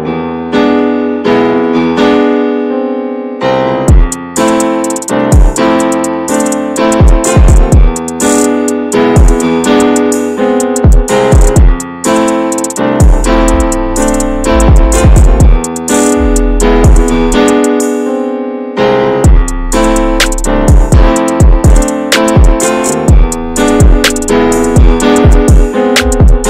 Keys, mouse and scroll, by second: 0.0-1.1 drag, 1.1 shift+middle click, 1.9 `, 2.1 middle click, 2.3 scroll up 1, 2.4 scroll down 2, 2.8 shift+middle click, 3.3 Tab, 3.5 Tab, 3.8 p, 4.1 Tab, 4.3 click, 6.5 shift+middle drag, 6.8 scroll up 1, 6.8-7.5 drag, 7.6-10.6 middle drag, 10.6 s, 11.6 scroll down 1, 11.8 middle drag, 12.1 ctrl+s, 12.4-12.8 middle drag, 12.8 alt+z, 13.1 middle click, 13.8 click, 14.2 middle click, 14.5 alt+z, 14.7-15.3 middle drag, 15.3 click, 15.5 Tab, 15.7 middle click, 16.1 Tab, 16.2 click, 17.4 click, 17.7 middle click, 18.0 Tab, 18.3 middle click, 18.9-19.2 scroll up 1, 19.5 alt+middle click, 19.7 alt+z, 20.0 shift+middle click, 20.3-21.2 shift+scroll up 1, 21.2 click, 22.4-24.3 drag, 24.3 middle click, 24.7 alt+z, 25.0 middle click, 25.8 ctrl+z, 26.1-26.4 middle drag.